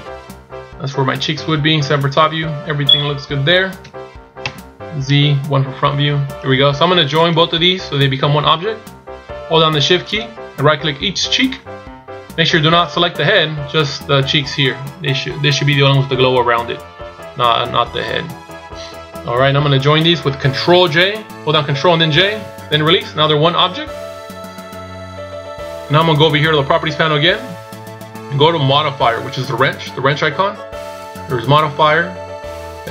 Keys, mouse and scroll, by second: 1.2 z, 1.8 KP_7, 3.9 KP_1, 4.4 z, 7.2 right click, 10.1 shift+right click, 13.6 scroll up 1, 30.9 click.